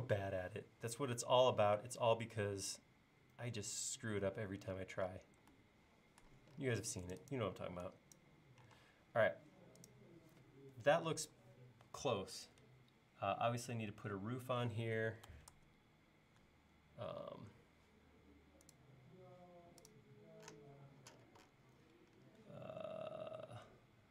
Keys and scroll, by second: 7.6 e, 8.8 space, 15.5 super+Tab.